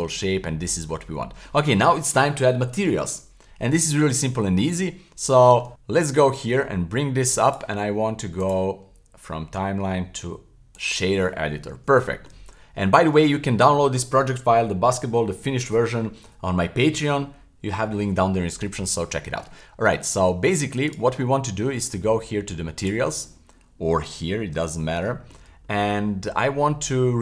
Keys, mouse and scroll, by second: 0.2-1.5 middle drag, 4.3 middle click, 5.4 shift+middle click, 6.3-7.6 drag, 8.4-10.9 drag, 12.0 shift+middle click, 12.5 scroll up 2, 12.9 shift+middle click, 19.2 shift+middle click, 19.5-20.1 middle drag, 20.9 right click, 21.5 middle click, 22.8 click, 23.9-24.3 scroll up 2, 24.4 shift+middle click, 24.4 shift+scroll down 1, 24.6-25.0 scroll up 2, 25.1 shift+middle click, 25.5-26.6 scroll up 2.